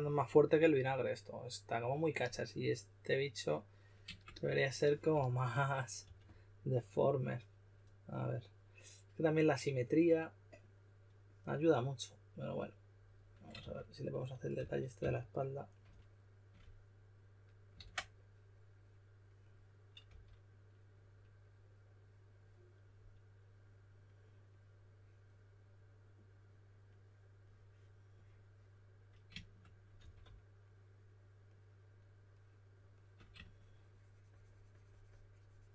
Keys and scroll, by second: 5.1-6.5 typing, 13.5-14.9 typing, 17.7 super+z, 20.0 s, 29.9 4.